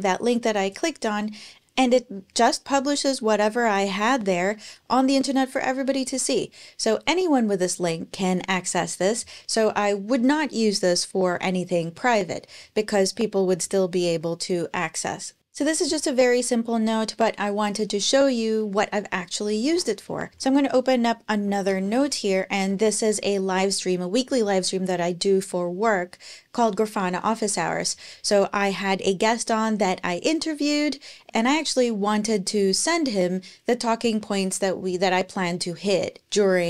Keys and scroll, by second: 19.5 super+Tab, 20.3 super+t, 20.5 super+o, 20.9-22.3 typing, 22.5 Return.